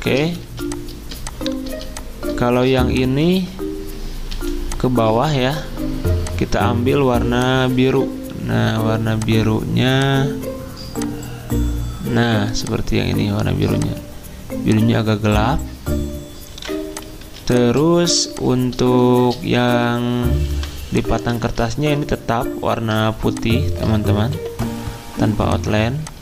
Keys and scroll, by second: 0.4 z, 2.7 v, 3.3 ctrl+z, 3.9-4.3 typing, 16.5-17.1 typing, 19.2 c, 20.5 v, 21.4 ctrl+z, 24.3 d.